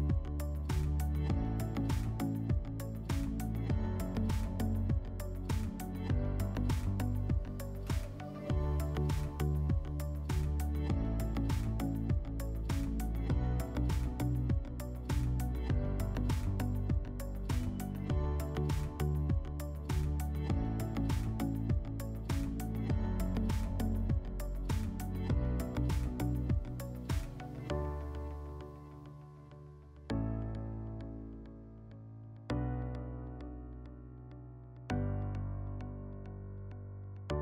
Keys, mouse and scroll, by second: 1.1 click, 2.0 alt+click, 3.4 click, 5.1 click, 5.9 click, 6.0 click, 6.4-7.3 typing, 8.1 click, 8.2 click, 8.6 click, 10.3 right click, 11.4 click, 12.5 right click, 14.8 click, 16.9-18.1 scroll, 18.1 click, 18.5 scroll, 19.5 click, 20.4 click, 21.1-22.1 typing, 23.5 click, 24.7 click, 25.7 click, 26.4 right click, 27.1 e, 29.7 a, 31.7 click, 32.2 w, 35.3 click, 35.8-36.7 typing, 37.3 click.